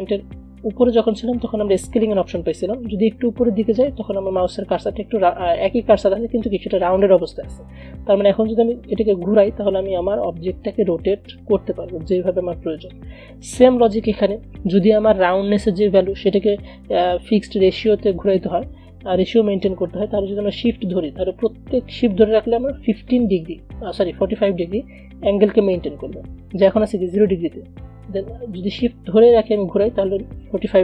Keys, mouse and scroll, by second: 9.1-17.0 drag, 17.0 ctrl+z, 21.4-30.8 drag.